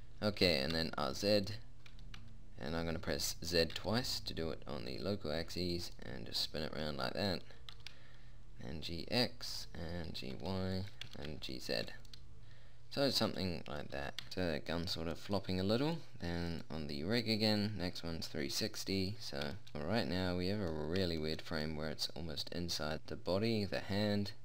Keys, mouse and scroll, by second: 0.8 r, 2.3 r, 6.4 middle click, 8.0 g, 10.5 g, 11.4 g, 12.5-13.7 middle drag, 17.5 click, 18.1 middle click, 19.1 middle click, 21.2 middle click, 22.3 middle click.